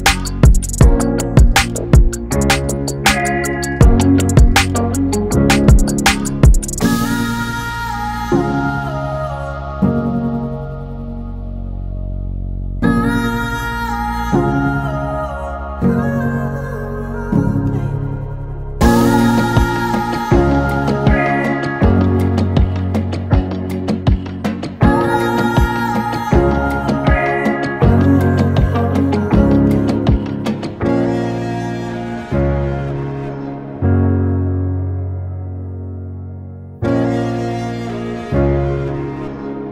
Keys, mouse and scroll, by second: 0.1 click, 2.0 click, 2.5 s, 4.5 middle click, 5.0 shift+z, 5.4 middle click, 7.0-7.5 scroll down 5, 7.3 middle click, 7.8 Tab, 8.1 click, 8.3 middle click, 9.2 middle click, 9.7-10.1 scroll up 1, 10.1 scroll down 1, 10.3 middle click, 11.1 scroll up 2, 11.3 middle click, 12.2 ctrl+z, 12.4 ctrl+z, 12.7 ctrl+z, 13.4 s, 14.8 KP_1, 15.3 shift+z, 15.9 click, 17.2 s, 18.1 g, 19.7 shift+z, 20.0 middle click, 20.2 scroll up 1, 20.3 Tab, 20.6-21.2 scroll down 2, 20.8 middle click, 22.4 KP_1, 22.7 shift+z, 23.5 click, 24.6 click, 25.2 click, 25.8 click, 26.3 Tab, 26.6 click, 28.3 s, 29.2 Tab, 29.6 middle click, 30.1 shift+z, 30.4 click, 30.7 click, 31.2 middle click, 32.7 middle click, 35.4 scroll down 1, 35.9 scroll down 1, 36.1 middle click, 36.1 scroll down 2, 36.4 middle click, 38.2-39.5 scroll up 3, 38.5 middle click.